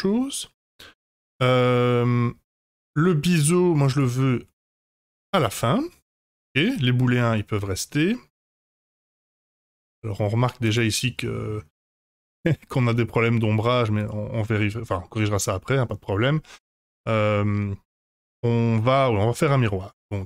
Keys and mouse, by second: 4.0-5.0 drag, 7.3-8.8 middle drag, 9.0 click, 9.7-10.1 middle drag, 10.6 click, 11.2 middle drag, 12.9-13.6 middle drag, 14.6-15.4 middle drag.